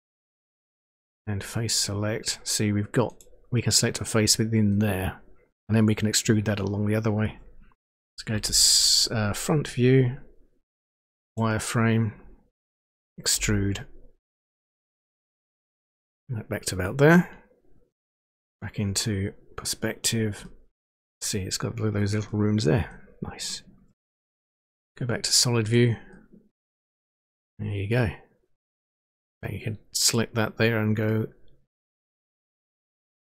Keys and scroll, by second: 8.4 End, 13.5 e.